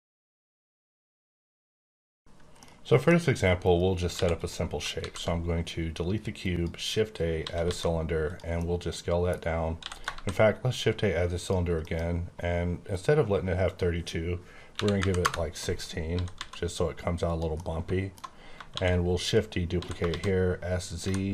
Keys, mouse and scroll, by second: 3.0-3.6 scroll down 5, 4.0 x, 4.3 click, 4.8 shift+click, 4.9 shift+a, 6.3 click, 7.3 typing, 8.2 click, 8.6 middle click, 9.7 x, 9.8 click, 10.1 shift+a, 11.3 click, 11.7 F9, 13.6 click, 14.6 KP_1, 15.0 KP_6, 15.2 KP_Enter, 16.0-16.3 typing, 17.2 click, 17.4 scroll down 1, 17.6 middle click, 18.6 shift+d, 19.2 click, 19.7 s, 20.0 shift+z, 20.8 click, 20.9 g.